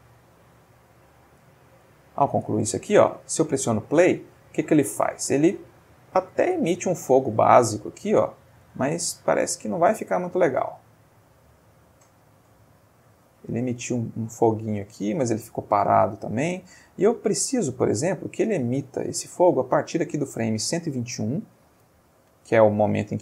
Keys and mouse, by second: 2.3 space, 3.8-4.5 middle drag, 4.7-5.4 middle drag, 5.8-6.4 shift+middle drag, 6.4-7.4 ctrl+shift+middle drag, 8.6 space, 9.8-11.2 drag, 11.9-19.7 drag, 21.6-23.2 drag.